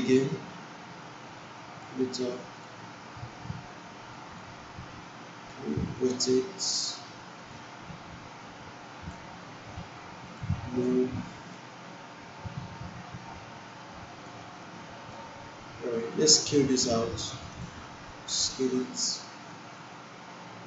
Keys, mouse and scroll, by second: 0.0-2.0 drag, 2.6-4.5 drag, 10.3-13.7 drag, 14.7-15.3 alt+middle drag, 18.1 click.